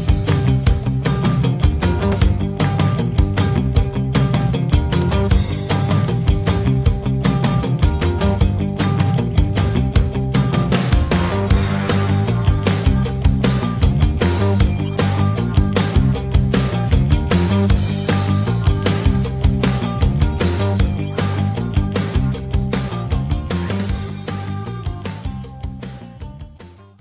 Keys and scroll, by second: 8.0 shift+F2, 8.5 Escape, 15.9 shift+F2, 16.4 F9.